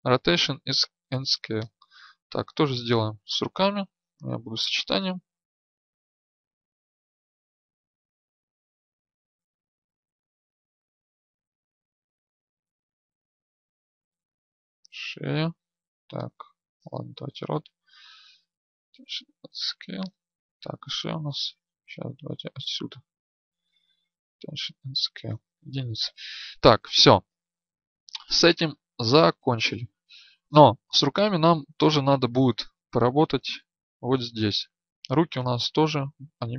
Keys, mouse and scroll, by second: 1.6 right click, 4.2 ctrl+a, 6.0 right click, 7.6 ctrl+a, 10.3 ctrl+a, 10.9 right click, 11.8 right click, 17.8 ctrl+a, 22.6 click, 23.6 ctrl+a, 23.6 right click, 25.2 KP_1.